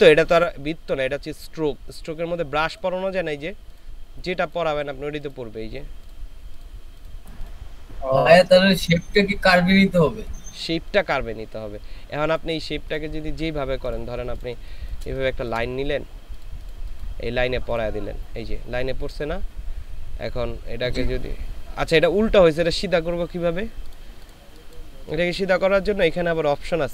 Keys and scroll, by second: 14.6 space.